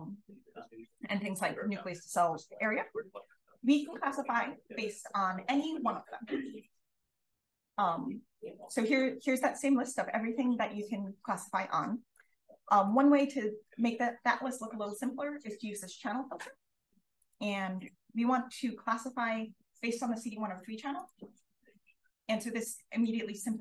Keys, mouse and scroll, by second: 0.4-1.2 scroll up 1, 2.0-4.4 scroll down 1, 4.4-5.7 scroll down 1, 5.7-7.1 scroll down 1, 7.1-8.6 scroll down 1, 8.6 click, 9.1-10.8 scroll up 1, 10.8-12.0 scroll up 1, 12.0 click, 12.0-12.8 scroll up 1, 12.8 click, 12.8-16.0 scroll up 1, 16.0-16.5 scroll up 1, 16.5-17.1 scroll up 1, 17.1 click, 17.1-20.2 scroll up 1, 20.2-21.0 scroll up 1, 21.0 click, 21.0-22.0 scroll up 1, 22.0 click, 22.0-22.5 scroll up 1, 22.5-23.3 scroll down 1, 23.3-23.6 scroll up 1.